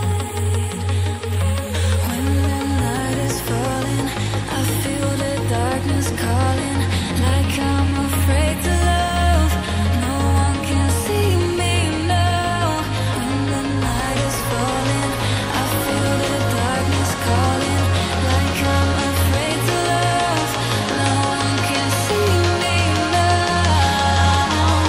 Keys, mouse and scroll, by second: 1.2 click, 2.5-2.9 scroll down 1, 2.9-3.5 scroll up 1, 3.5 click, 3.7 double click, 5.0 click, 5.1 double click, 7.4 click, 7.5 double click, 9.0 click, 9.1 double click, 10.2 scroll down 1, 10.5 scroll up 1, 11.2 click, 12.9 double click, 15.7 click, 15.9 double click, 18.3 click, 18.5 double click, 19.8 click, 21.2 click, 22.8-23.7 scroll up 1, 23.7 click, 23.8 double click.